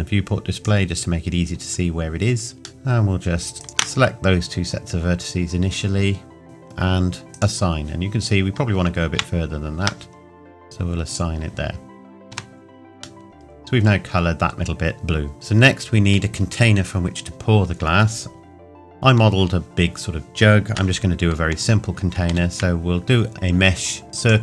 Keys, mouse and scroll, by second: 1.5 scroll up 1, 2.7 Tab, 3.6 alt+click, 7.1 scroll up 2, 7.3 click, 9.1 ctrl+KP_Add, 11.1 click, 12.3 Tab, 13.3 middle click, 14.9-15.3 scroll down 1, 15.3 middle click, 15.6-17.5 scroll down 1, 18.5-19.0 scroll down 1, 24.2 click.